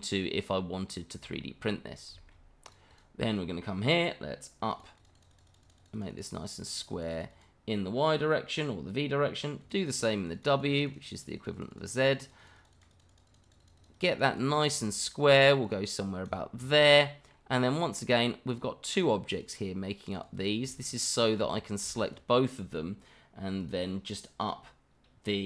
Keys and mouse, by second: 1.4 shift+middle drag, 2.1 shift+middle click, 2.6 click, 2.9 click, 4.7 click, 4.9 click, 5.1 click, 5.3 click, 5.5 click, 5.6 click, 5.8 click, 5.9 click, 6.1 click, 6.2 click, 6.4 click, 6.6 click, 6.7 click, 6.9 click, 7.1 click, 7.3 click, 9.6 click, 9.8 click, 9.9 click, 10.1 click, 10.3 click, 10.5 click, 10.7 click, 10.9 click, 11.0 click, 11.2 click, 11.4 click, 11.5 click, 11.7 click, 11.9 click, 12.0 click, 12.2 click, 12.4 click, 12.5 click, 12.7 click, 12.9 click, 13.1 click, 13.3 click, 13.4 click, 13.6 click, 13.8 click, 13.9 click, 14.1 click, 14.3 click, 14.4 click, 14.6 click, 15.6 click, 16.6-17.3 middle drag, 17.9-18.2 middle drag, 18.5 click, 19.3 click, 20.1 click, 20.8 shift+click, 21.5 click, 22.0 shift+click, 23.6 click.